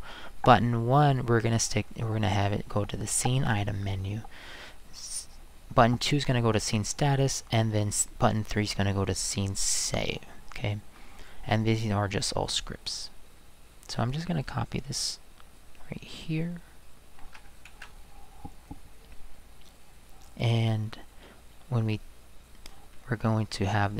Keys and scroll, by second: 17.7 ctrl+c.